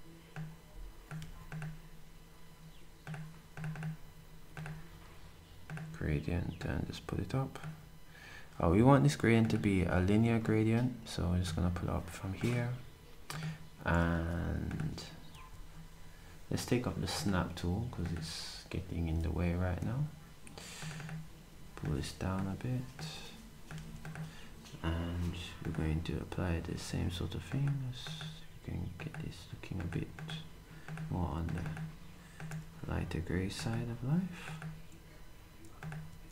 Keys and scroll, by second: 1.1 s, 11.4 s, 14.1 d, 15.2-16.0 typing, 23.7 s, 36.1 d.